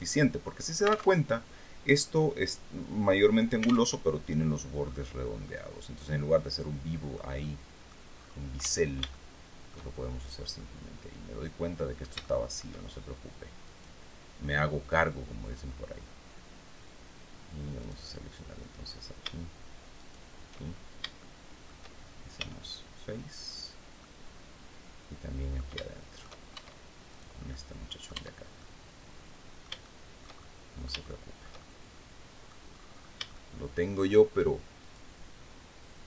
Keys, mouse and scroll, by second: 0.6 alt+Tab, 3.3 alt+Tab, 4.3-4.6 scroll up 2, 4.9-6.8 drag, 6.9 click, 8.0 Tab, 8.5 shift+middle click, 10.0-12.2 middle drag, 13.1 right click, 14.9 click, 17.3 right click, 19.4 shift+right click, 20.2 shift+scroll down 1, 20.7 shift+middle click, 21.8 f, 22.7-23.2 scroll down 1, 23.5-25.2 middle drag, 26.0 shift+Tab, 26.6 right click, 27.0 click, 27.6 Tab, 28.0 click, 28.2 middle click, 29.1 shift+click, 30.2 shift+middle click, 31.5 middle click, 32.6 shift+scroll up 1, 32.8 shift+middle click, 34.3 right click.